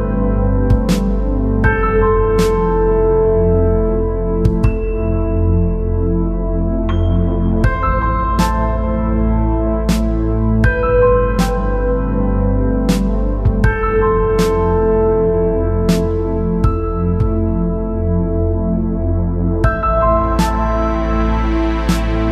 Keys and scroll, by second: 2.1-2.7 space, 4.7-5.7 space, 10.8 space, 18.1 ctrl+j.